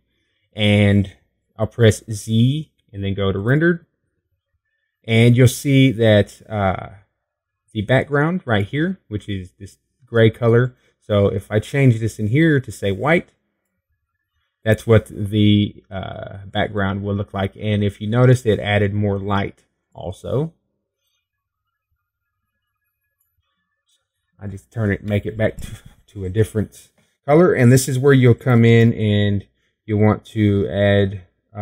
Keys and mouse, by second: 0.0 Escape, 4.2 z, 23.0 click.